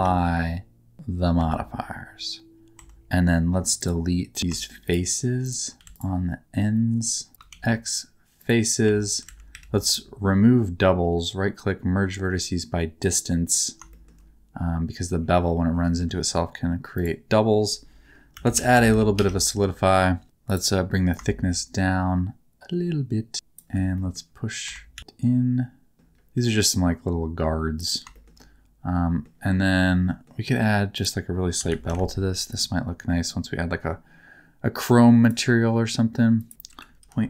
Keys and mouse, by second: 0.0 ctrl+a, 1.3 ctrl+a, 2.7 Tab, 3.5 3, 3.8 middle click, 4.4 3, 5.8 alt+z, 7.5 x, 8.8 1, 9.2 alt+z, 9.5 a, 9.9-13.1 drag, 13.9 shift+middle click, 15.9 Tab, 17.0-19.1 drag, 20.2 click, 21.1-23.6 shift+drag, 23.9 middle click, 24.6 Tab, 24.9 a, 25.2 s, 25.9 g, 28.1 shift+middle click, 28.3 middle click, 29.8 middle click, 31.0-32.6 drag, 35.2-37.2 drag.